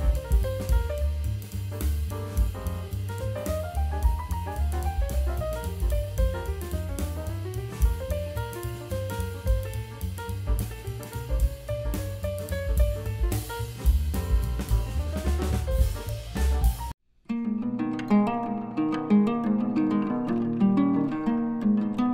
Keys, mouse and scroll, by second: 5.1-5.8 scroll up 5, 7.6 drag, 7.9-8.7 drag, 10.0 click, 10.7 click, 15.1 click, 17.3 click, 18.3 click.